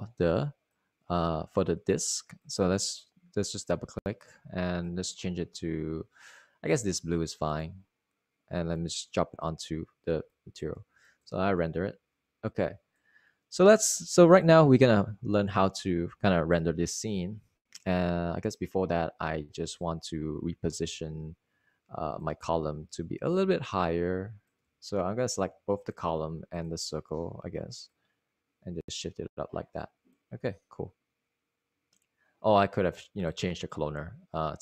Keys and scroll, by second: 12.7 super+r, 21.6 typing, 23.9-24.4 typing, 25.9 super+z.